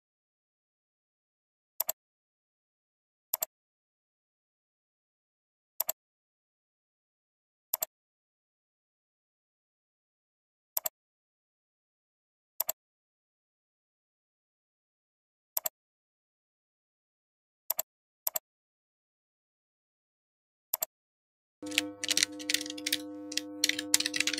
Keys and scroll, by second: 1.5 ctrl+v.